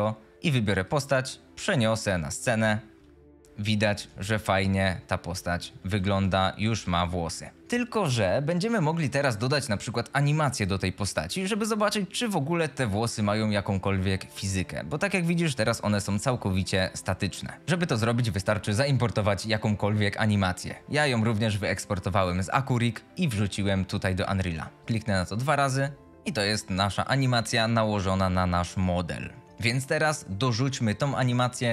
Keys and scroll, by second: 2.5-7.3 typing, 16.1 q, 16.4 w, 17.5 s.